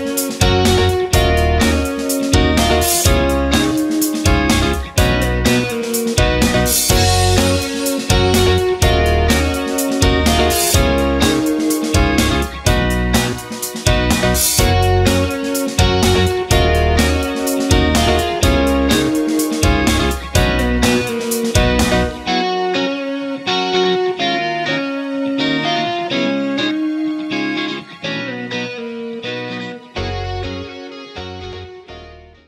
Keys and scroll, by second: 4.8 ctrl+g, 6.6 ctrl+g, 8.2 b, 12.9 shift+F2, 13.7 F9.